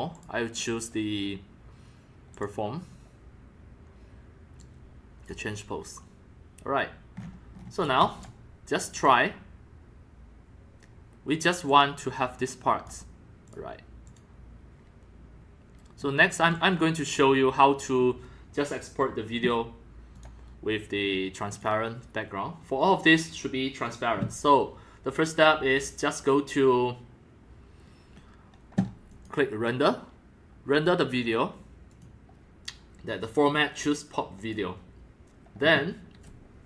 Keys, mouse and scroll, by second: 0.1 click, 2.3 click, 2.5-5.3 drag, 6.9 click, 7.2 scroll up 2, 7.2-7.6 scroll down 7, 7.6 scroll up 1, 7.8 scroll down 1, 7.8 click, 7.8 x, 8.2 c, 8.3-9.0 drag, 10.9-11.5 drag, 11.7 click, 11.8 drag, 12.3 click, 13.5 click, 14.1 click, 16.0 scroll down 2, 16.5 click, 16.5-17.2 x, 17.9-19.4 middle drag, 17.9 scroll down 1, 20.2 click, 20.3 click, 21.5 click, 29.1 click, 29.3 click, 31.9 click, 33.2 click, 34.4 click, 35.4-36.6 drag.